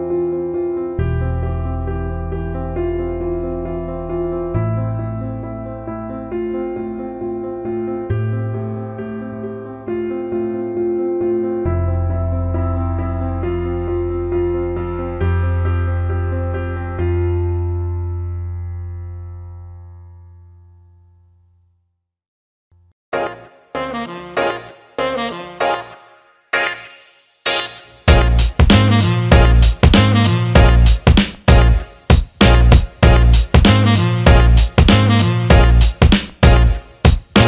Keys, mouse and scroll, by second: 0.8 click, 4.1-9.1 drag, 9.4 alt+middle drag, 10.3 Tab, 11.1 alt+middle click, 11.4 alt+shift+middle click, 14.8 click, 15.5 alt+shift+middle click, 17.2 alt+shift+middle click, 25.5 click, 26.8 click, 28.5 Tab, 29.8 a, 31.0 click, 31.8-37.4 drag.